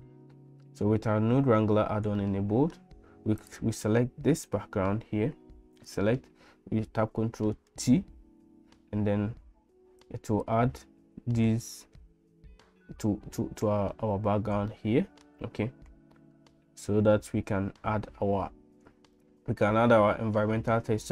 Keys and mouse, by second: 2.2 shift+middle click, 5.8 click, 7.7 ctrl+t, 10.0 click, 14.9 shift+middle click.